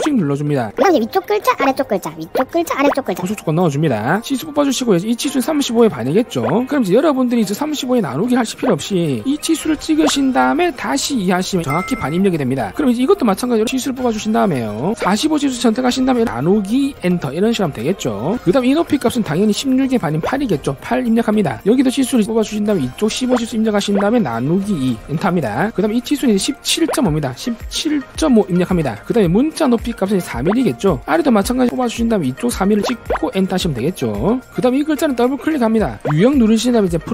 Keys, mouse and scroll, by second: 1.4 click, 1.9 click, 2.6 click, 4.3 d, 4.7 click, 5.7 click, 6.4 click, 10.1 click, 11.6 2, 12.3 click, 13.6 d, 13.7 click, 14.8 click, 16.0 click, 17.0 2, 18.7 click, 19.6 click, 20.2 click, 21.7 d, 22.5 click, 23.2 click, 24.0 click, 25.2 2, 25.8 click, 26.4 click, 26.9 click, 27.7-29.6 typing, 29.3 click, 30.0 click, 30.4 click, 30.7 4, 31.4 click, 32.1 click, 32.8 click, 33.1 click, 35.7 click, 36.0 click, 36.2 click.